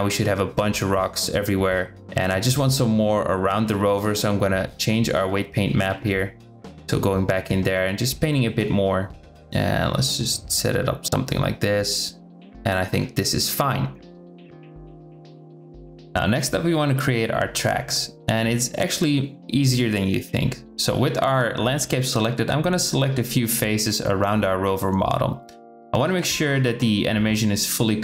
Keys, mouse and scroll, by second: 1.1 KP_7, 4.1-5.3 drag, 6.0 middle click, 6.2 click, 7.6 middle click, 8.5 click, 9.3 KP_0, 10.0-11.4 drag, 11.7 click, 13.0 Tab, 13.7 Tab, 14.4 click, 17.2-19.6 drag, 20.3 Tab, 21.1 KP_7, 23.1 click, 26.3 click, 26.8 c.